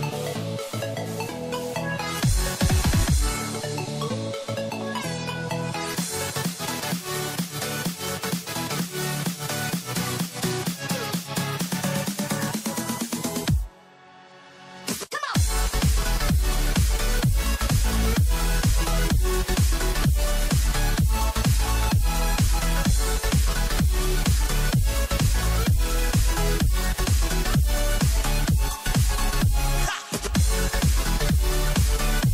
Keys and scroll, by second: 7.9 ctrl+=, 9.9 ctrl+shift+n, 11.3 ctrl+alt+z, 18.0 ctrl+=, 18.7 ctrl+shift+n, 23.8 ctrl+d, 24.2 ctrl+-, 27.1 ctrl+=, 29.7 ctrl+shift+n.